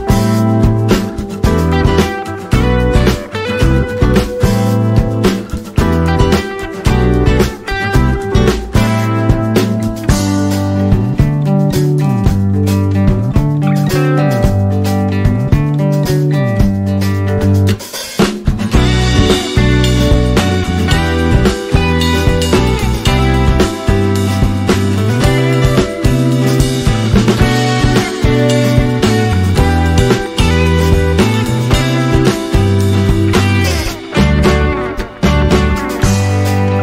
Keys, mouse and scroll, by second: 0.2 click, 9.1-24.5 drag, 32.4 click.